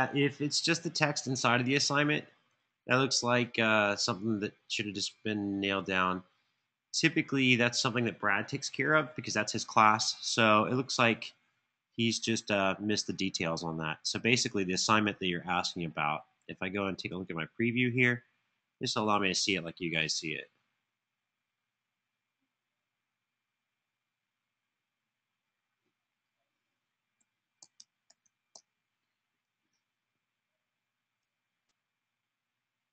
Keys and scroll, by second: 27.1-28.2 typing.